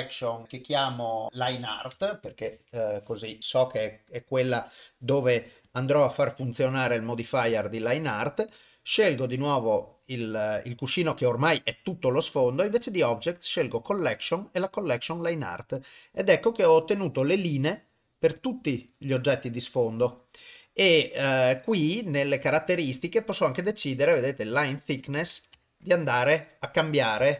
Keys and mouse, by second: 5.6 click, 8.5 click, 12.4 click, 13.7-14.9 drag, 15.7 click, 16.8 click, 18.4 click, 20.1 click, 22.4 click, 24.3-25.6 drag.